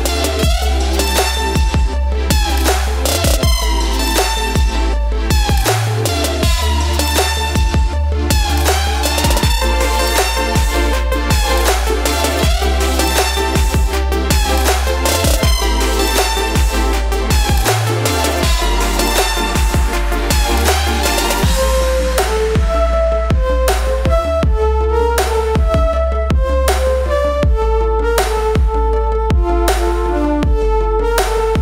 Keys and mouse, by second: 1.8 click, 4.9 click, 8.2 click, 9.5-10.5 typing, 15.6 click, 19.9 typing, 21.7-22.3 typing, 22.3 click, 24.6-25.4 typing, 28.5 click.